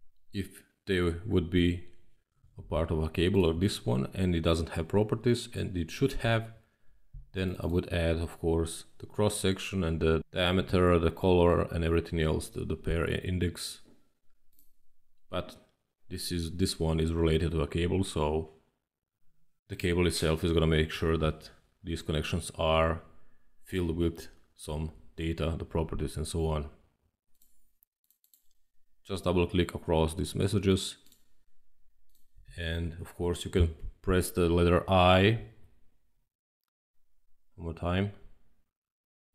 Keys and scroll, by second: 35.3 i, 37.9 i.